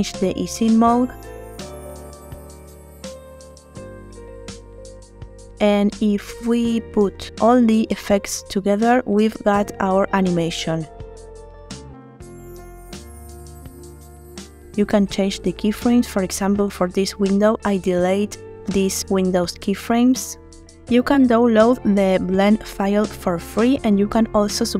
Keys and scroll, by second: 3.4 space, 7.0 space, 14.6 space, 17.2 space, 19.7 space, 24.3 space.